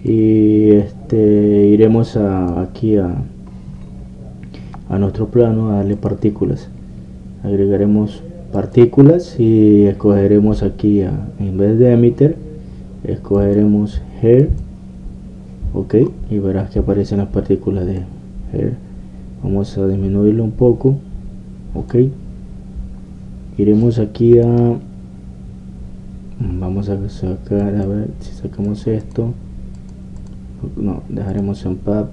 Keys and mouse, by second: 1.1 click, 1.8-8.8 drag, 9.5-16.5 drag, 16.5 middle click, 17.0-19.0 middle drag, 19.0-26.7 drag, 28.6-32.1 drag.